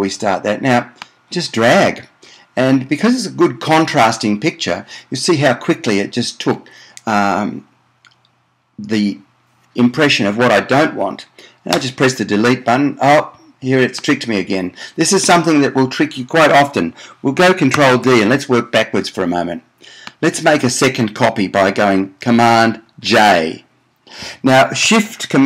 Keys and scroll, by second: 12.0 BackSpace, 17.9 super+d, 23.2 super+j.